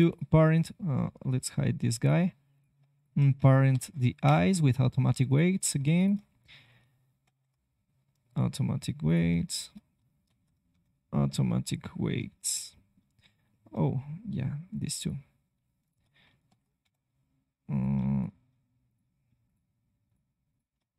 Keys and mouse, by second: 0.4 click, 1.4 h, 3.6 ctrl+p, 5.7-8.5 drag, 7.2 ctrl+p, 9.0-11.6 drag, 10.2 ctrl+p, 16.4 ctrl+p.